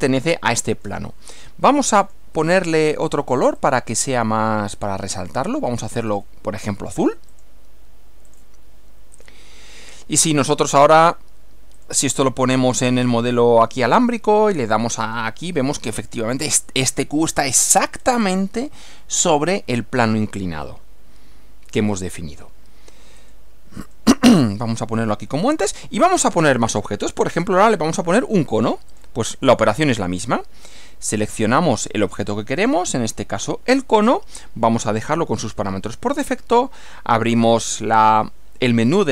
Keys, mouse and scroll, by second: 2.0 click, 3.6 click, 4.7 click, 6.1 click, 7.3 click, 8.3 click, 9.1 click, 9.6-10.8 middle drag, 11.7 click, 12.8 click, 14.7 click, 17.9 scroll up 1, 18.1 scroll down 1, 18.2 scroll up 1, 19.3 scroll down 1, 20.7-21.9 middle drag, 22.1 middle click, 23.2 click, 23.9 click, 25.1 middle click, 28.9 click, 30.7 click, 32.9 click, 36.2 click.